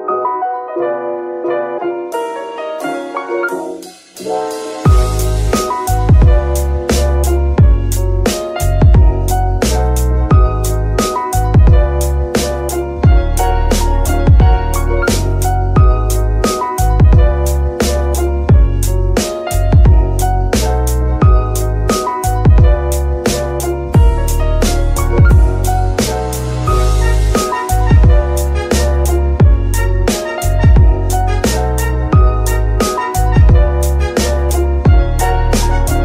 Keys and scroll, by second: 3.5 z.